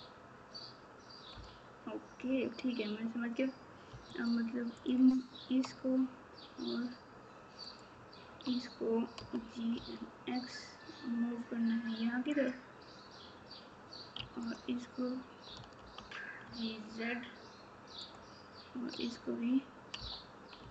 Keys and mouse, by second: 1.3 KP_Subtract, 3.9 2, 7.7 shift+click, 14.1 1.